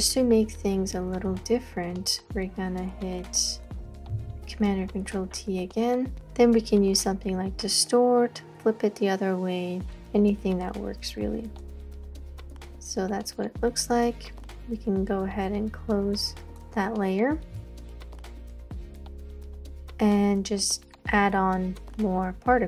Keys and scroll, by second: 1.3 space, 1.8 space, 1.9 space, 4.1 super+t, 18.3 space, 18.5 space, 18.6 space.